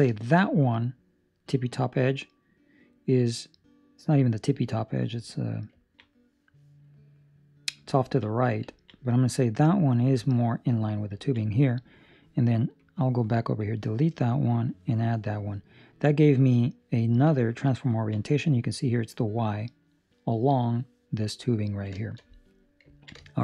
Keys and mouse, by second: 0.0 shift+middle click, 0.4 middle click, 5.7 ctrl+middle click, 6.8 middle click, 8.0 ctrl+middle click, 8.2 middle click, 8.7 ctrl+middle click, 9.0 middle click, 11.2 ctrl+middle click, 12.7 click, 15.8 middle click, 17.2 click, 17.8 ctrl+middle click, 21.6 ctrl+middle click, 21.9 shift+middle click, 22.9 ctrl+middle click, 23.1 shift+middle click.